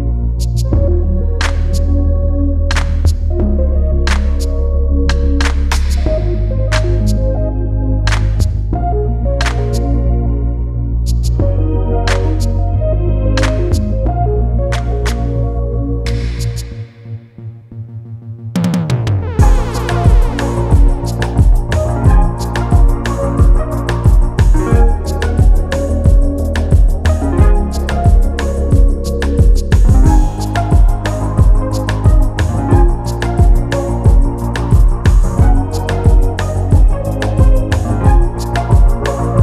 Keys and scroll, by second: 4.7 ], 21.3 Return.